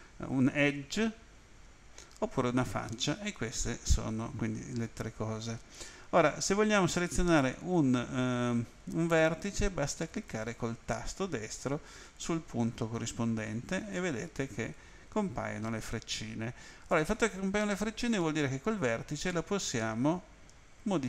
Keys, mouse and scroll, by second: 7.5 right click, 11.9 right click, 13.0 right click, 14.5 right click, 19.3 click.